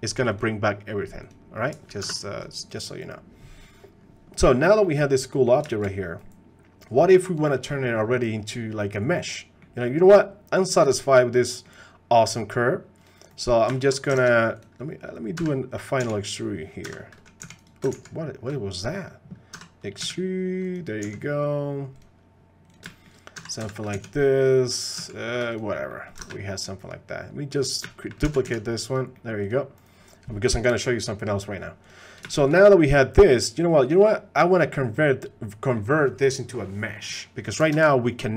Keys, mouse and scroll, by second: 0.3 click, 2.0 shift+h, 2.7 click, 4.4 middle click, 4.8-5.5 middle drag, 5.7 shift+click, 8.2-9.6 drag, 9.9-11.6 drag, 13.7 shift+click, 15.4 ctrl+Tab, 15.4 e, 17.9 ctrl+z, 18.8 click, 19.5 e, 22.6 s, 22.7 click, 22.9 shift+middle click, 23.3 e, 25.0 s, 25.9 click, 26.3 ctrl+Tab, 26.5 click, 27.8 shift+drag, 28.2 shift+d, 29.1 click, 29.4 click, 32.3 shift+click, 33.9 click, 35.0 click, 37.7 ctrl+Tab, 37.9 click.